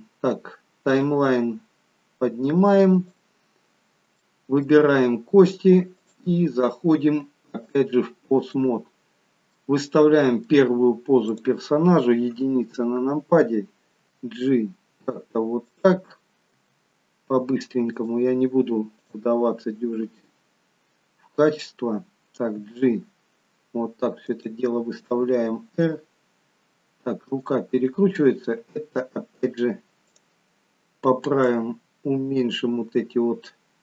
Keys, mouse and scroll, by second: 1.0 click, 3.5-4.1 scroll up 3, 4.1 shift+middle click, 6.0 click, 7.6 click, 9.4 middle click, 11.2 click, 12.2 KP_1, 14.0 g, 16.5 r, 18.9 click, 22.5 g, 25.1 r, 27.8 click, 30.0 click.